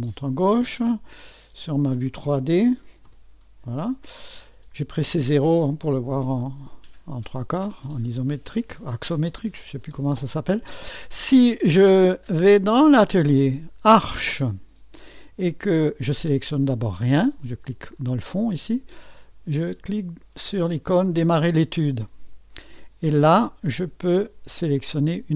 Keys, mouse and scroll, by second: 0.1 space, 3.1 typing, 4.0-5.6 drag, 5.5-6.2 typing, 7.4-8.1 scroll up 1, 8.1 click, 9.1 middle click, 11.7 click, 13.0 click, 13.7 click, 14.1-15.2 drag, 16.3-20.8 drag, 21.4 click.